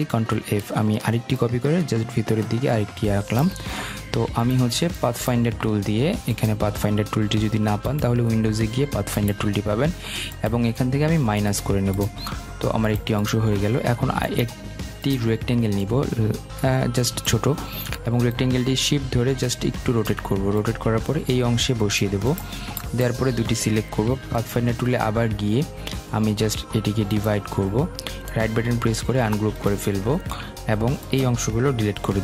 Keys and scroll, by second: 31.5 Delete.